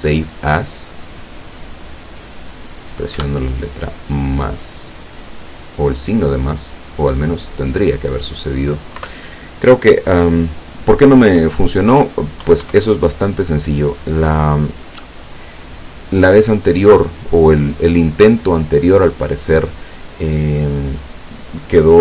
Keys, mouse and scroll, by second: 1.5 click, 3.2 KP_Add, 6.7 click, 7.7 click, 9.0 BackSpace, 12.5 KP_1, 12.7 KP_0.